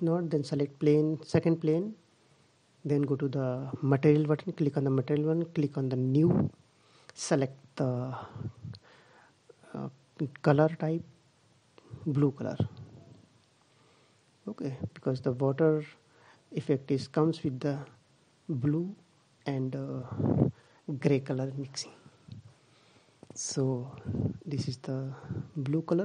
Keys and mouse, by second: 3.6-5.3 drag, 6.0 click, 9.9-11.6 drag.